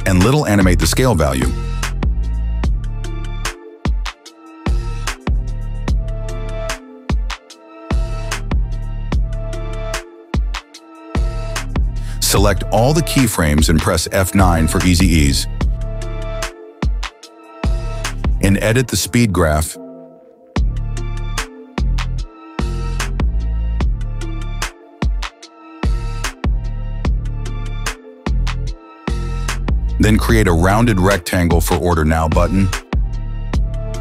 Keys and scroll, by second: 10.5 KP_0, 10.7 Return, 11.9 space, 17.2 F9, 27.3 space, 28.9 space.